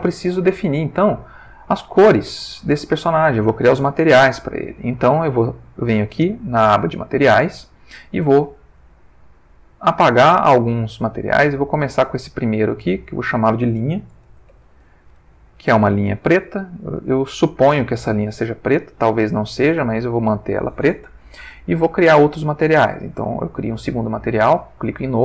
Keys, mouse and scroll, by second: 0.4 ctrl+middle click, 1.4 ctrl+shift+middle click, 2.9 shift+middle click, 5.0 click, 9.9 click, 11.1 click, 11.5 click, 12.4 click, 13.1 click, 14.2 shift+l, 14.5 shift+i, 14.7 shift+n, 15.1 shift+h, 15.6 shift+Return, 23.0 click, 24.2 click.